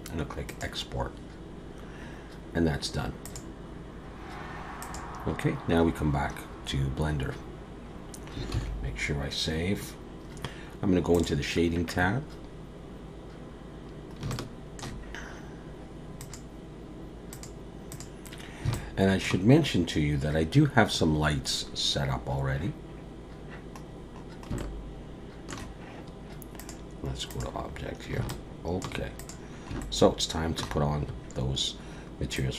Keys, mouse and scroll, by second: 8.6 ctrl+s.